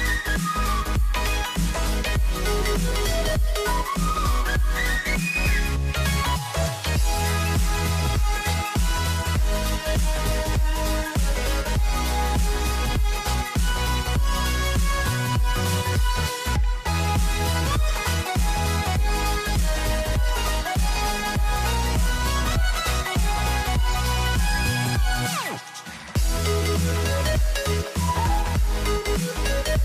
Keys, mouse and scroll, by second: 1.4 Tab, 3.2 middle click, 5.0-6.8 shift+middle drag, 6.8 c, 8.7 space, 12.4 Down, 14.3 Down, 16.2-18.1 middle drag, 18.1-19.9 scroll down 8, 19.9 middle click, 21.7-23.6 middle drag, 23.6 a, 25.5-25.9 scroll up 6, 26.0-26.7 middle drag, 26.7 scroll down 2, 26.8 middle click, 27.1 shift+middle click, 27.7 click, 28.2-28.5 middle drag, 28.5 a, 28.6 a, 28.8 shift+middle click, 28.9 scroll up 2, 29.1 click, 29.3 middle click, 29.5 click, 29.6 Tab, 29.7 middle click.